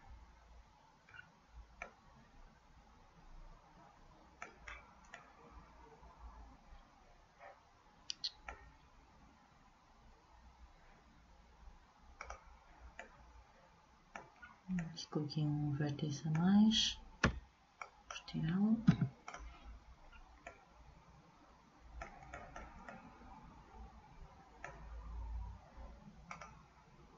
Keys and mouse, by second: 4.8-7.6 middle drag, 12.3-14.1 drag, 13.1 middle click, 13.1 right click, 14.1-17.4 middle drag, 17.4 b, 19.0 Delete.